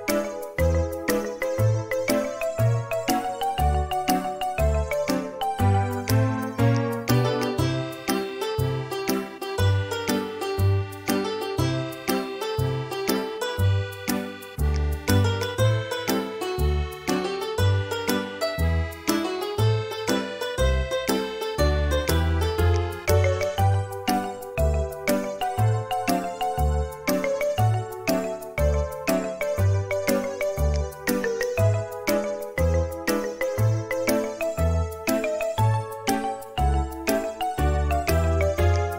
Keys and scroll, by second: 4.0 space, 5.9 q, 18.2 space, 22.2 w, 24.2 q, 28.2 Right, 33.1 space, 34.5 q.